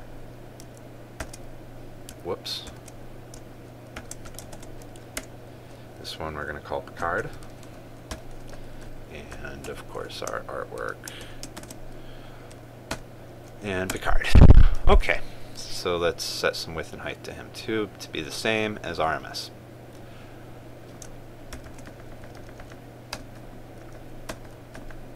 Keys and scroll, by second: 2.0 ctrl+v, 3.4 ctrl+z, 5.1 ctrl+space, 12.2 ctrl+space, 22.2 ctrl+c.